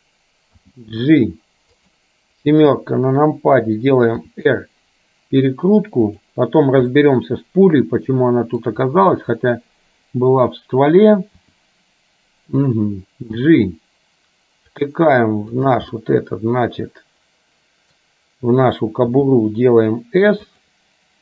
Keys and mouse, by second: 0.7 g, 2.9 KP_7, 4.4 r, 7.1-8.7 middle drag, 11.5 r, 13.5 g, 16.0-18.1 middle drag, 19.1 s.